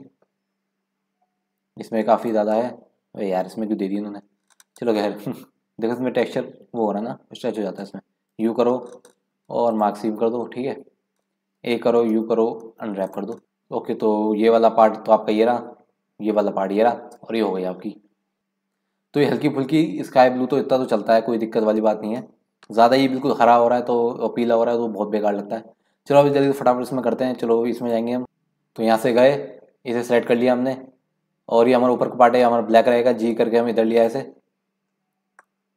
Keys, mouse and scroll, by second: 0.4 scroll up 2, 0.6-2.2 middle drag, 2.2-3.5 drag, 3.5 KP_Decimal, 4.0-5.0 scroll up 4, 5.0-8.1 middle drag, 8.3 u, 10.4-10.8 scroll down 7, 11.6 a, 12.1 u, 13.4-14.5 middle drag, 18.4 ctrl+z, 20.3 scroll down 1, 20.5-20.8 scroll up 3, 21.2-21.9 scroll down 1, 22.2 middle click, 22.9-24.1 scroll down 15, 24.4 scroll up 1, 26.0 scroll down 1, 26.3 middle click, 27.3 scroll up 2, 27.8 click, 29.2-31.1 drag, 31.1 scroll down 1, 32.2-32.9 scroll down 4, 33.2 g, 34.3-34.8 scroll up 4, 34.8-35.4 scroll up 5, 35.4-35.7 middle drag.